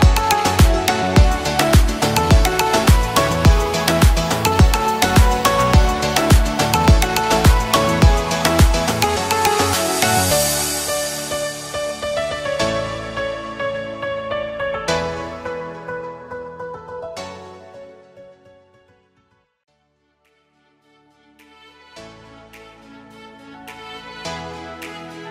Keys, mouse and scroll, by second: 3.2-10.1 drag, 11.3-12.5 drag, 14.6 alt+shift+click, 20.6 Up, 21.8 alt+shift+click, 22.9-23.6 drag.